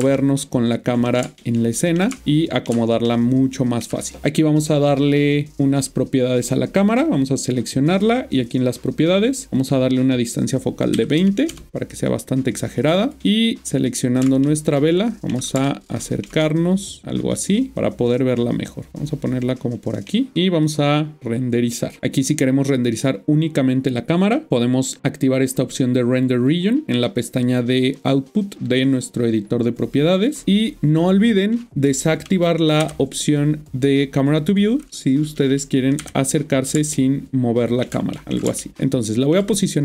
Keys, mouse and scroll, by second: 0.1 ctrl+middle click, 1.4 shift+middle click, 5.5 click, 6.9 click, 10.9 click, 11.1 typing, 11.5 Return, 13.0 click, 13.2 ctrl+middle click, 14.4 shift+middle click, 15.6 ctrl+middle click, 16.4 middle click, 20.6 click, 24.5 click, 30.3 click, 34.4 click, 36.0 click, 36.9 ctrl+middle click, 38.1 shift+middle click.